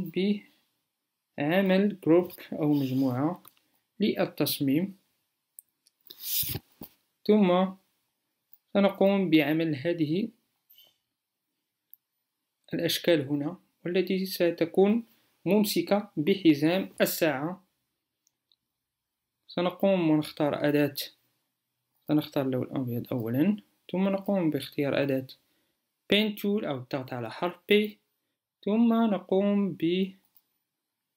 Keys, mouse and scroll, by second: 24.9 p.